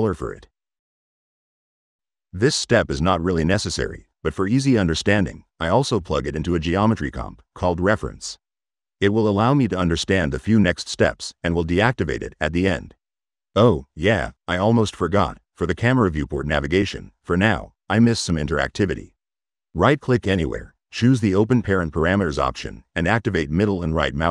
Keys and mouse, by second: 0.3 c, 1.1 click, 1.8 click, 2.2 drag, 3.3 right click, 6.8 middle click, 7.7 click, 11.8 middle click, 12.4 click, 13.9 click, 13.9 right click, 21.2 click, 23.3 click.